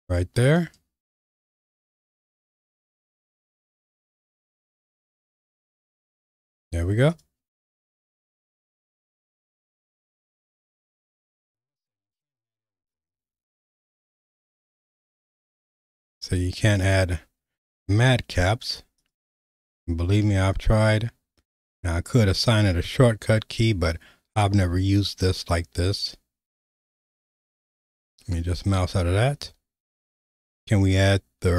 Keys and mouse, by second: 5.5 q, 8.1 q, 11.0-27.8 drag.